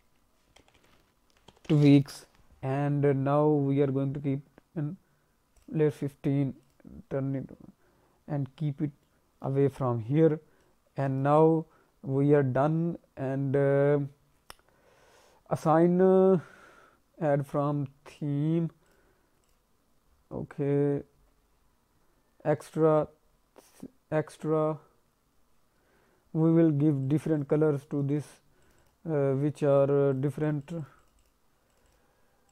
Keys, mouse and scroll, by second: 5.6 click, 6.6 click, 8.4-9.0 scroll down 1, 9.0 alt+middle click, 10.6 click, 12.3-13.4 scroll up 2, 13.4-14.3 scroll up 3, 14.3-15.8 scroll down 1, 15.8-16.6 scroll up 3, 18.0 click, 19.4 click, 20.0-22.4 scroll down 2, 24.5-25.8 scroll down 3, 27.0 click, 27.1 click, 27.3 click, 27.7 click, 27.9 click, 28.0 click, 28.6 click, 28.8 click, 29.7 click, 31.6 click, 31.8 click, 32.4 click.